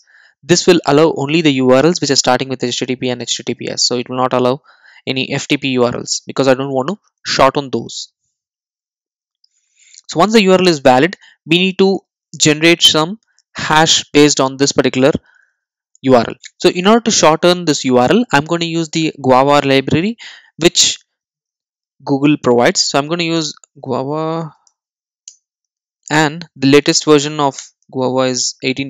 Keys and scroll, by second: 16.3 super+e, 20.1 super+e, 23.4 Return.